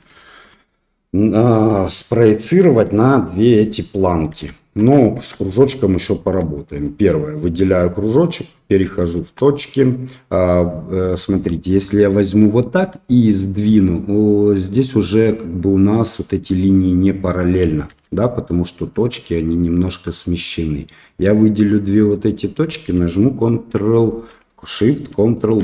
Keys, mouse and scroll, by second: 0.2 shift+middle click, 2.8 click, 3.9 click, 4.5 shift+click, 5.3 Tab, 6.2 Tab, 6.7 click, 7.2 click, 7.6 Tab, 8.0 middle click, 9.6 1, 11.5 click, 13.2 click, 17.9 ctrl+z, 21.1-22.4 drag, 25.3 ctrl+shift+b.